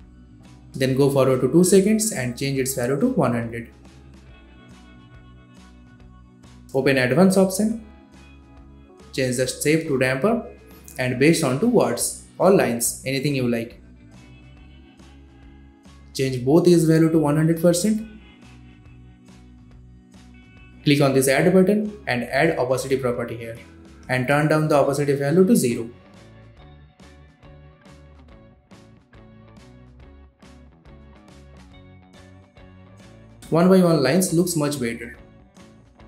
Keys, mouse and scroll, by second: 1.1-3.1 drag, 3.5-4.7 typing, 6.6 Return, 6.6 click, 8.0-9.4 scroll down 2, 9.4-16.8 drag, 14.2-16.1 drag, 17.1-17.4 drag, 18.1-18.7 drag, 19.4-20.3 scroll up 2, 20.3 click, 23.6-24.4 scroll down 1, 24.4-25.4 drag, 26.3 space, 30.0 click, 31.7 space, 35.5-36.0 drag.